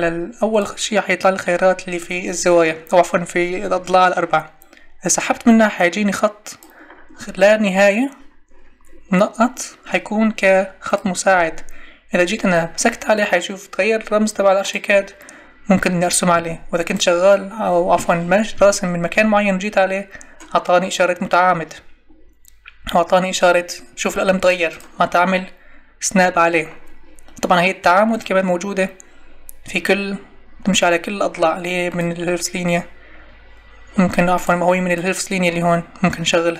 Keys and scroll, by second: 16.3 Escape.